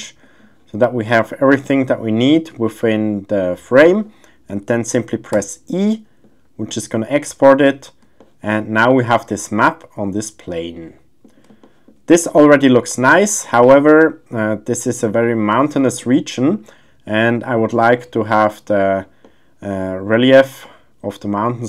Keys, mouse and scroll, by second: 5.4 e, 6.7-7.5 middle drag, 8.2 shift+middle drag, 8.9-11.2 middle drag, 11.6 shift+middle click, 12.2-15.0 middle drag, 15.8 shift+middle click, 19.2-21.6 middle drag.